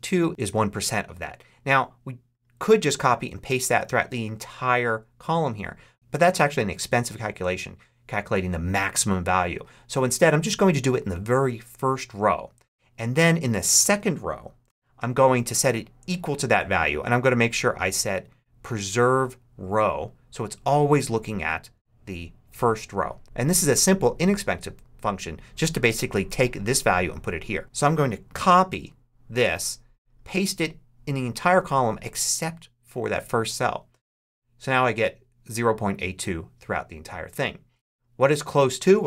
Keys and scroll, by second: 14.5 =, 28.2 super+c, 34.1 super+v.